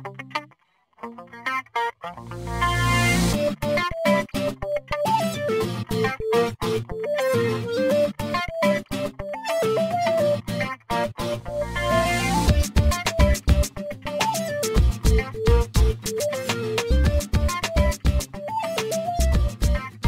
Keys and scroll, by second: 1.9 e, 10.2 space, 11.3 p, 14.5 space.